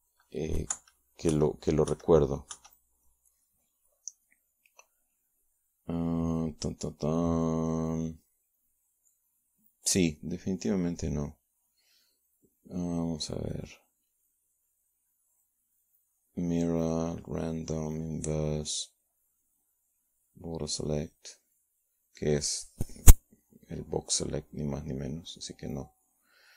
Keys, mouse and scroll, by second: 0.2 click, 17.1 click, 18.3-19.5 drag, 20.7-22.1 drag, 22.3-26.1 drag, 26.3 shift+click.